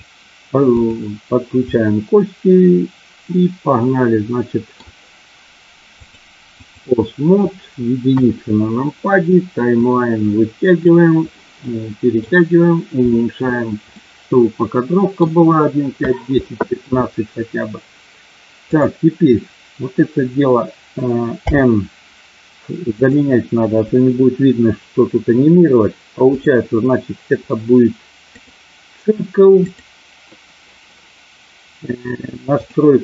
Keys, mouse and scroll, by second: 0.6 click, 1.7-4.8 middle drag, 6.0 click, 8.1 KP_1, 10.0-11.0 drag, 11.5 middle click, 14.0-15.1 middle drag, 21.4 n, 22.9 click, 26.4-28.5 drag, 29.6 click.